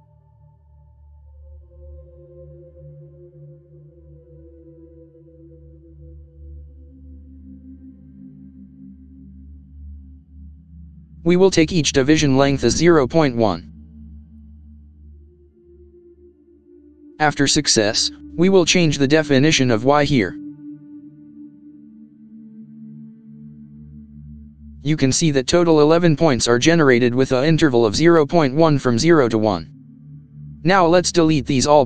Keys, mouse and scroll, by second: 0.0-1.2 typing, 2.4 BackSpace, 4.6 e, 5.5 shift+9, 6.2 shift+0, 8.4 ctrl+Return, 9.0 Tab, 10.5 x, 13.0 shift+=, 13.4 shift+=, 15.1-15.4 typing, 22.2 click, 23.0 Return.